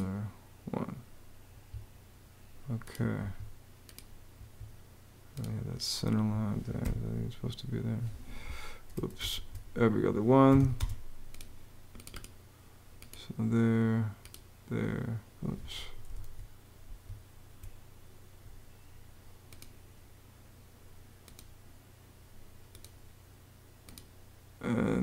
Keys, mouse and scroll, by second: 1.2 Escape, 2.9 Escape, 4.1 Escape, 6.5 BackSpace, 9.1 super+z, 10.0-10.8 typing, 15.9 super+z, 17.0 super+z.